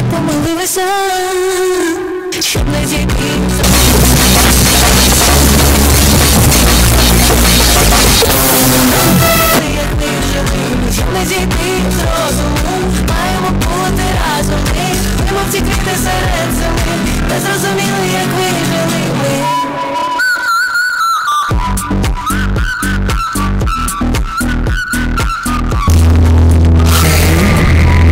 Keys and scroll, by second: 9.6 Page_Down.